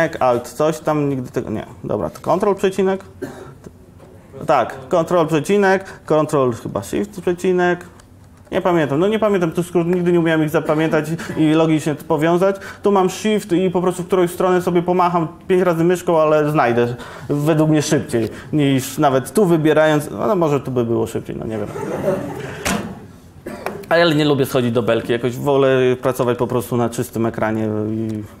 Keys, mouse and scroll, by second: 2.8 alt+m, 2.8 ctrl+., 4.1 ctrl+., 4.5 ctrl+,, 4.8 ctrl+,, 5.0 ctrl+., 7.5 ctrl+,, 7.8 ctrl+shift+., 8.2 ctrl+shift+,, 18.9 click, 26.3 shift+space, 26.5 shift+space, 28.1 shift+space.